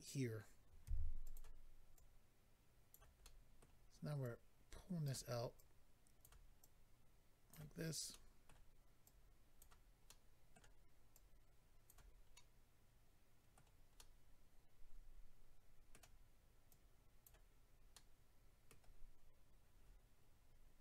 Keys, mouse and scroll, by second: 0.8 f, 1.2 click, 1.3 click, 1.9 click, 3.2 middle click, 4.2 click, 5.6 click, 6.6 click, 8.1 middle click, 9.0 click, 10.1 middle click, 11.1 click, 12.3 middle click, 14.0 middle click, 16.7 click, 17.9 middle click.